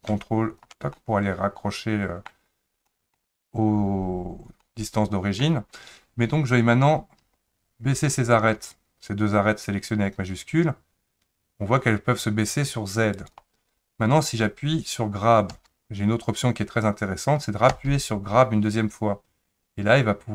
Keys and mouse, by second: 0.9-2.3 middle drag, 2.8 middle click, 4.6 middle click, 7.2 2, 7.5 click, 8.2 shift+click, 9.8 click, 10.0-13.2 drag, 15.5 g.